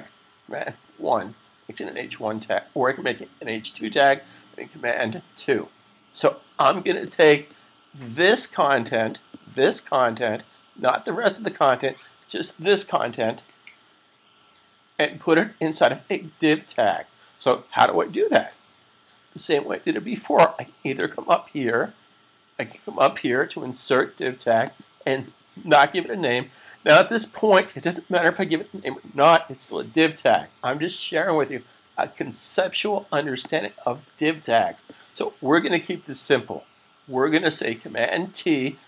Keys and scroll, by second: 0.5 super+1, 5.1 super+2, 38.1 super+t.